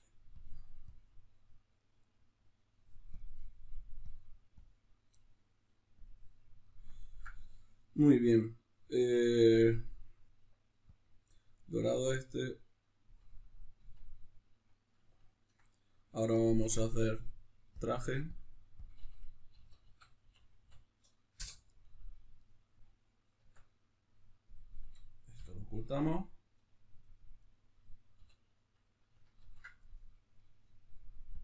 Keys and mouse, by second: 0.3-3.1 drag, 4.1-6.1 drag, 13.9 Tab, 14.7-16.9 middle drag, 16.9-18.3 drag, 21.4 Return, 21.4-23.5 drag, 23.5 Tab, 23.5-27.4 middle drag, 25.3 h, 27.4 right click, 28.1 l, 29.4 ctrl+i, 31.3 click.